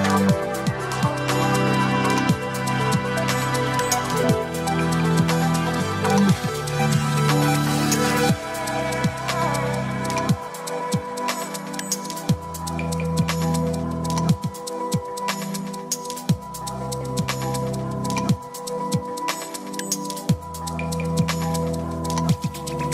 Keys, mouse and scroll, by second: 1.8-4.2 drag, 9.7-12.2 drag, 13.0-13.8 s, 13.9 click, 13.9 s, 14.0 s, 14.7 click, 16.3-18.4 s, 18.7 click, 18.7 s, 19.5-20.8 drag, 21.5-22.9 drag.